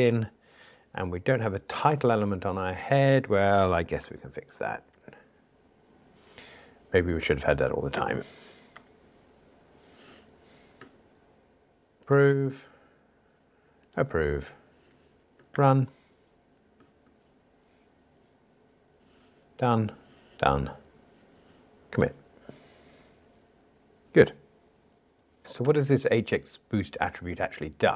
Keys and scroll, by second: 8.7 ctrl+r, 11.9 super+4, 12.5 super+F11, 15.6 ctrl+r, 20.4 ctrl+alt+m.